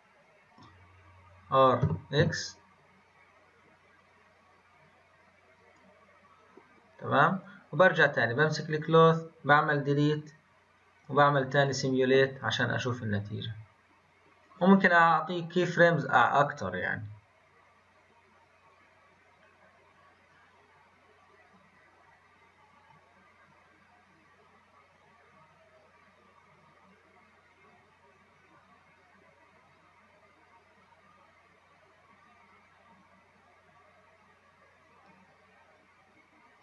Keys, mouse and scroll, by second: 1.8 r, 9.0-9.8 drag, 9.8 scroll down 2, 11.0-36.6 drag.